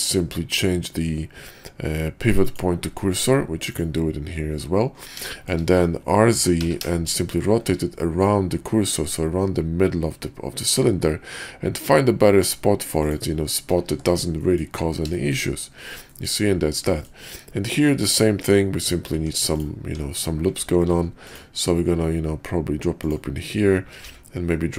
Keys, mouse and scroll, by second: 3.7-4.2 drag, 5.3 shift+drag, 6.3 r, 13.9 shift+2, 14.4 drag, 15.1 shift+drag, 16.1 click, 16.9 click, 18.3 Tab, 19.1 Tab, 19.8 Tab, 20.9 ctrl+r, 24.0 ctrl+r.